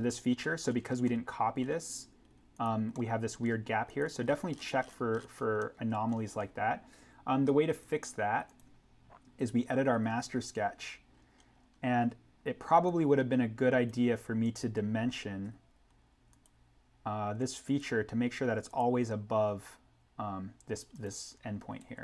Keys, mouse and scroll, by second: 1.1 scroll, 2.5 click, 2.9-3.5 scroll, 3.8 click, 4.2 scroll up 1, 5.5 middle click, 5.9 scroll, 7.7 click, 10.2 alt+n, 11.0-11.6 scroll down 1, 12.8 click, 15.4 d, 16.3 click, 21.7 Escape.